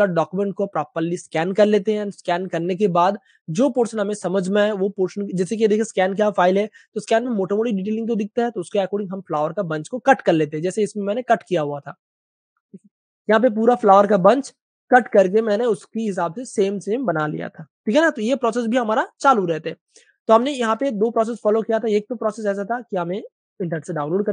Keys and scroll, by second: 1.2-2.0 typing, 3.6-4.3 typing, 5.4 super+space, 5.6 typing, 9.0 space, 12.0-12.7 typing, 13.7 super+z, 14.1 super+space, 15.7 super+space, 15.9 typing, 17.9 super+space, 18.0 super+space, 18.5 space, 19.0 super+space, 20.2 super+space, 20.9 v.